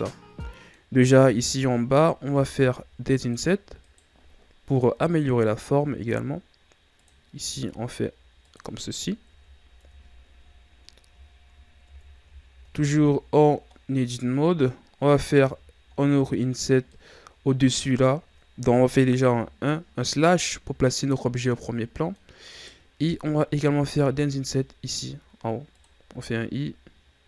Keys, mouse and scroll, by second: 1.0-1.3 scroll down 2, 1.3-2.3 scroll up 1, 2.3 ctrl+Tab, 3.8 right click, 4.9 i, 7.4 i, 9.2 KP_1, 9.7 Tab, 10.8-11.1 scroll down 1, 11.1 scroll up 4, 11.8 Tab, 12.3 scroll up 1, 12.8 z, 13.6-14.7 middle drag, 14.7-15.4 scroll up 4, 15.4 z, 15.9 scroll down 2, 16.8-19.2 middle drag, 19.2 KP_Divide, 21.4-22.5 middle drag, 22.5 right click, 23.7 i, 26.1 i.